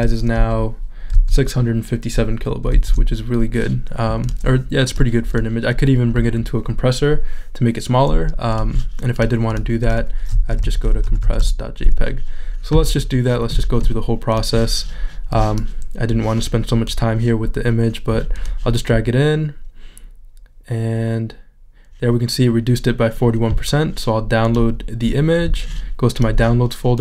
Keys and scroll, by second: 1.3 shift+super+z, 10.3 c.